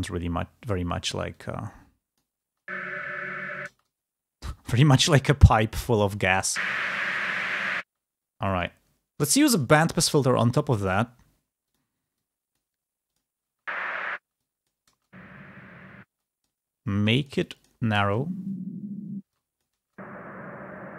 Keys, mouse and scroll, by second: 0.5 click, 1.3-2.5 drag, 2.5 space, 5.5-6.8 drag, 6.8 space, 7.7 space, 9.4 click, 11.6-13.3 drag, 13.3 space, 14.3-15.6 drag, 15.9 space, 16.0 click, 17.8 space.